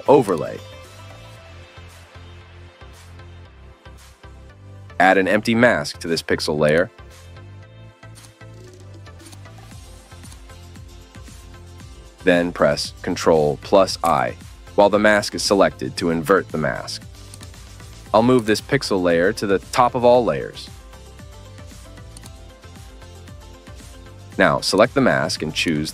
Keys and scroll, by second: 14.0 ctrl+i.